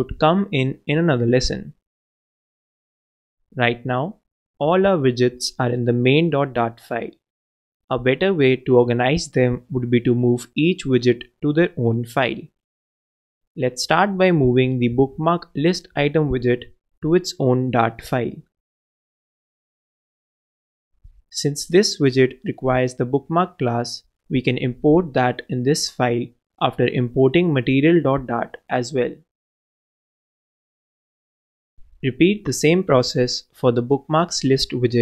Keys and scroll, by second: 7.4 shift+super+x, 8.2 super+x, 8.3 super+BackSpace, 14.9-17.8 typing, 20.3 super+Return, 20.3 super+v, 22.9 alt+Return, 29.6 super+a, 30.0 alt+super+l, 33.4 shift+super+Left, 33.8 shift+super+x, 34.1 super+BackSpace.